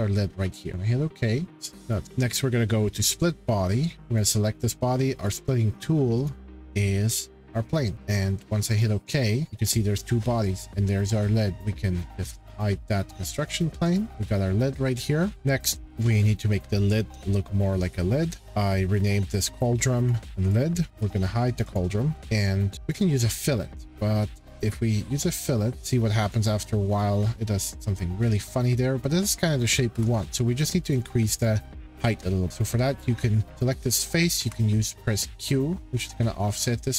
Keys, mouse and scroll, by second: 0.7 click, 1.9 click, 2.0 click, 3.9 click, 4.2 click, 5.3 click, 6.2 click, 7.9 shift+middle click, 8.8 click, 9.6 click, 11.5 click, 11.5 middle click, 12.2 click, 14.1 click, 14.3 middle click, 14.7 middle click, 14.9 middle click, 15.1 scroll, 15.3 click, 17.7-18.0 scroll, 19.0 click, 20.0 click, 20.5 click, 21.7 click, 22.2 click, 22.2 middle click, 22.9 click, 23.9 click, 26.2 click, 26.6-27.0 scroll, 26.6 middle click, 26.7 middle click, 29.9 shift+middle click, 30.9 click, 31.4 click, 32.5 click, 33.5 click, 34.4 q, 36.1 middle click.